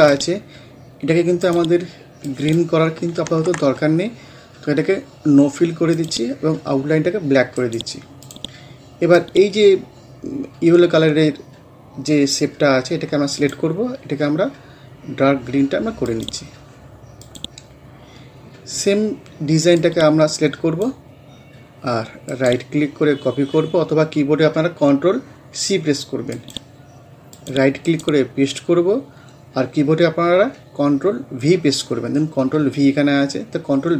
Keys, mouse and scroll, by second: 3.3 ctrl+z, 6.0 click, 7.6 right click, 8.3-15.9 drag, 16.1 click, 17.8 scroll down 1, 19.8-22.3 drag, 22.3 right click, 26.3 click, 27.9 right click.